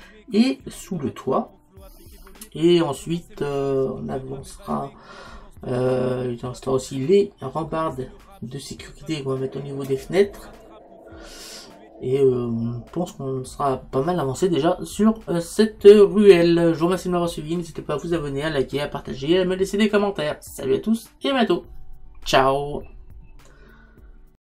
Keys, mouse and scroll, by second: 7.1-24.4 middle drag.